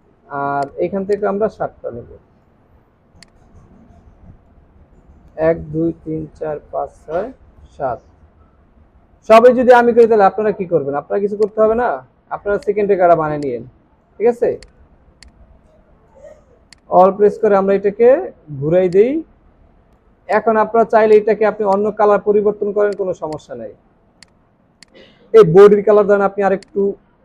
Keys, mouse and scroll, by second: 0.3 alt+scroll up 3, 3.2 shift+click, 10.9 alt+scroll down 1, 12.4 space, 13.2 alt+scroll down 2, 14.2 alt+scroll down 1, 16.7 alt+click, 18.9 shift+click, 20.2 shift+click, 22.2 alt+scroll up 1.